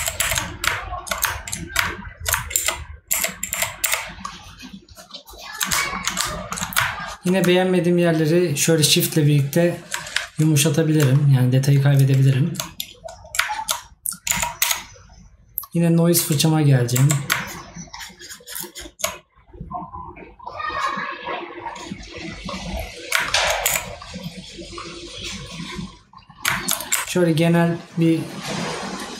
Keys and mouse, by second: 6.3 right click, 10.2 right click.